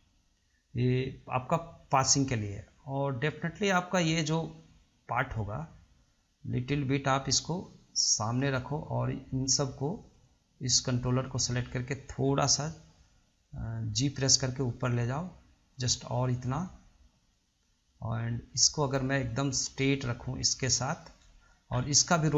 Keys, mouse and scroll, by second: 5.4 click, 6.8 click, 10.4 click, 14.6 click, 18.7 click, 19.6 click, 21.9 scroll up 1.